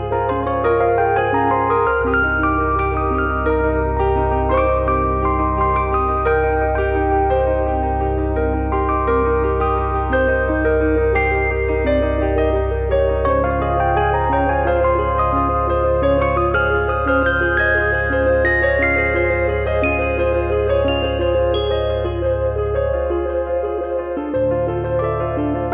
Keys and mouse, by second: 0.5 click, 1.4 click, 1.7 click, 2.3 click, 3.7 click, 7.2 click, 8.7 click, 9.9 click, 11.7 click, 12.7 click, 13.2 click, 14.8 click, 16.0 click, 17.0 click, 17.6 click, 18.6 click, 20.1 middle click, 20.4 middle click, 24.3 middle click.